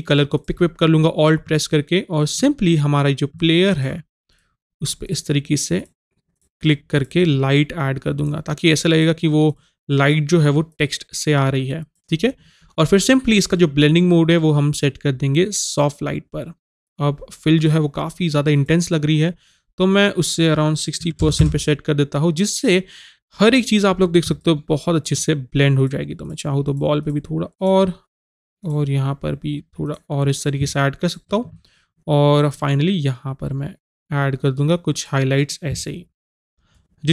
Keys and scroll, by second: 21.0 KP_6, 21.2 KP_0.